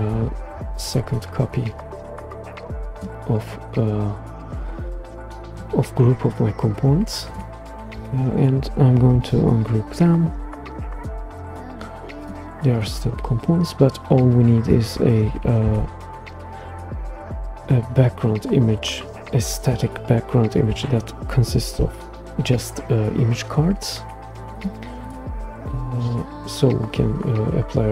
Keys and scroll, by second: 0.5 super+c, 0.8 super+v, 9.1 shift+super+g, 15.6 shift+super+g, 21.5 super+g.